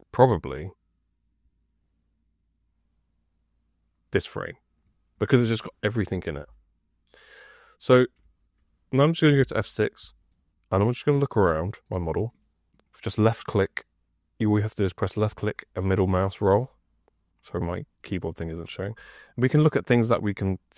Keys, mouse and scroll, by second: 9.3 F6.